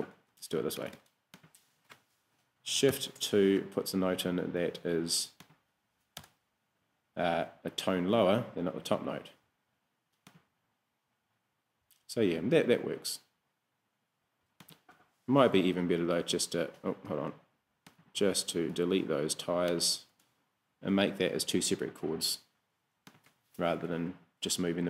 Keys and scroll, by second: 0.6 Escape, 2.9 shift+2, 6.2 BackSpace, 7.2 BackSpace, 16.2 BackSpace, 17.1 Escape, 18.8 BackSpace, 20.1 BackSpace.